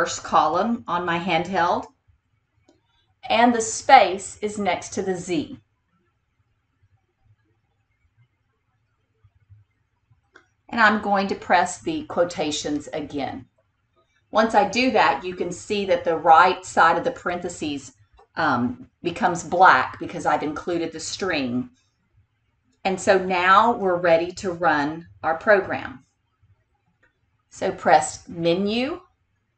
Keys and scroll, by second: 3.8 space, 7.6 d, 12.8 ctrl+*, 28.1 Menu.